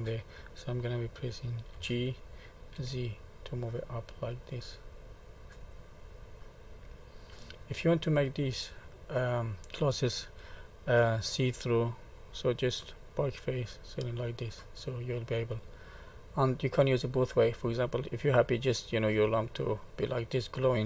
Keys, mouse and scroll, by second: 1.7 g, 6.4 middle click, 8.2 click, 9.0 middle click, 13.6 click, 14.4 middle click, 16.2 middle click, 16.2-17.1 scroll up 1, 17.1-18.2 scroll up 1, 19.0 click, 19.8 middle click.